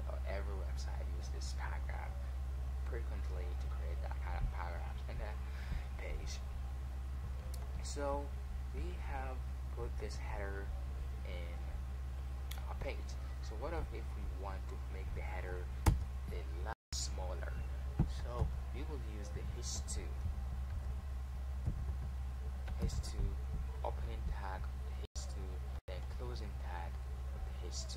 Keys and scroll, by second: 14.5 Tab.